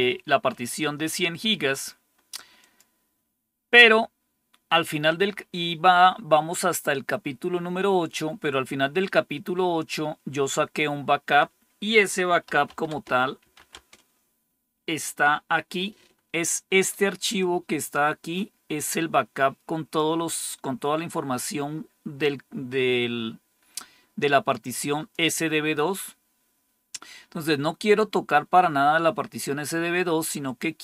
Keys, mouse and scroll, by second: 2.5 click, 9.7 click, 12.1-13.8 typing, 17.3-19.9 drag, 24.2 click, 30.4-30.8 drag.